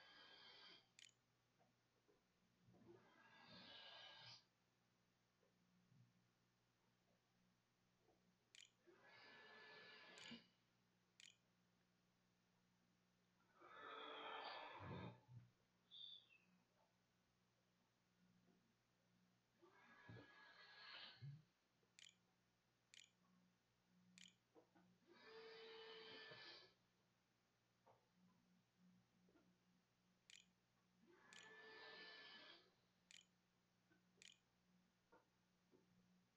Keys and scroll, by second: 0.2 ctrl+s, 7.5-9.4 typing, 10.5 ctrl+z, 11.0 ctrl+s, 14.4 a, 20.8 Tab, 20.8-25.0 typing, 28.3-32.3 typing, 33.6 ctrl+s.